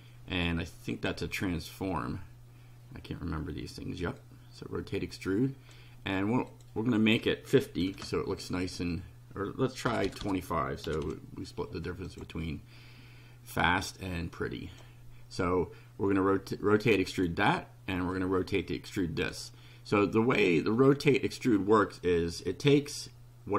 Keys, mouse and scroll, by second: 0.9 click, 4.2-5.9 drag, 6.5 click, 7.8 KP_5, 8.1 KP_0, 9.9 BackSpace, 10.9 2, 11.0 KP_5, 12.1 click, 13.6-14.9 drag, 17.1 click, 18.1-19.5 drag.